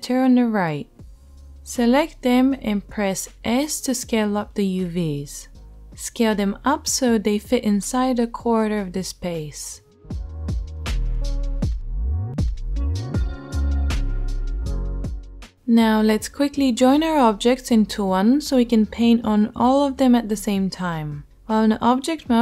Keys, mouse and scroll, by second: 3.0 s, 4.6 s, 9.1 s, 10.3 g, 13.7 a.